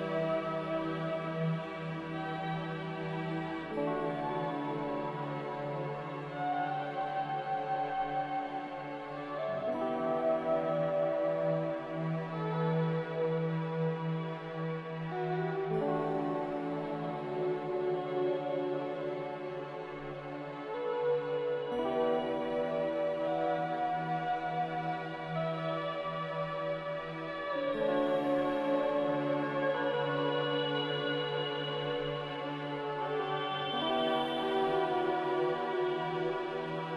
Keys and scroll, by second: 0.0-1.1 typing, 22.6 3, 22.7 Return, 24.4 2, 24.5 Return, 25.8 m, 28.9 a, 34.4 a.